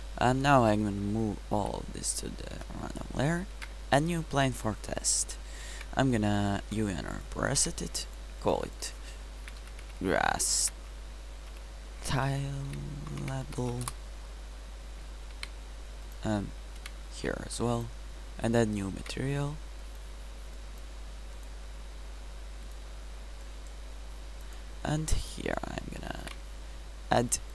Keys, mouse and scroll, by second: 1.6 m, 3.6 shift+a, 5.3 KP_Decimal, 5.8 Tab, 6.6 u, 7.6 Tab, 10.2 s, 15.4 ctrl+c, 16.8 ctrl+v, 19.1 ctrl+v, 26.3 ctrl+v.